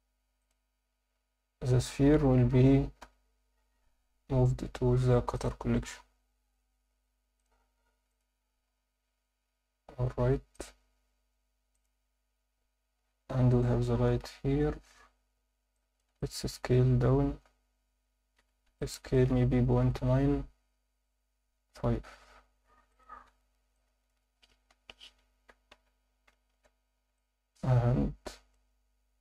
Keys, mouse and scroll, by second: 0.4 click, 3.0 m, 7.4 click, 8.1 click, 10.5 click, 11.7 click, 15.6 scroll up 2, 15.7 alt+shift+middle click, 16.2 ctrl+alt+middle click, 16.7 s, 18.4 Escape, 18.8 ctrl+alt+middle click, 19.7 ., 19.9 9, 23.3 Tab, 23.7 alt+middle click, 24.7-26.9 typing, 29.0 x.